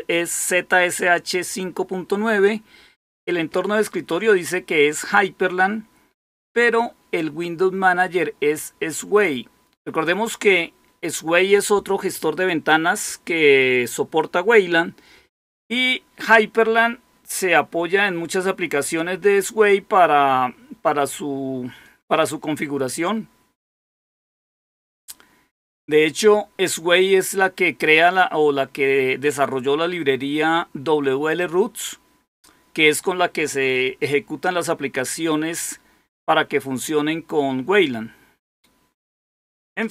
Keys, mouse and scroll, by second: 7.1-10.2 drag, 39.5 click.